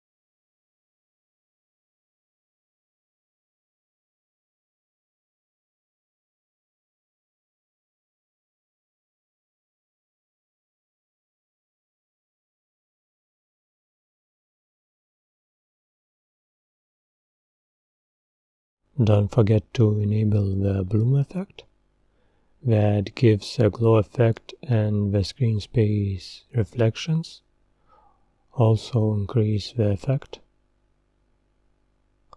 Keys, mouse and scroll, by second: 0.8-5.1 drag, 5.1-7.3 middle drag, 7.3-10.2 drag, 11.8-12.5 scroll down 1, 16.1 click, 17.3-24.4 middle drag, 24.4 click, 25.0-28.5 middle drag, 28.5 click, 30.8 scroll up 3, 31.0-32.3 middle drag.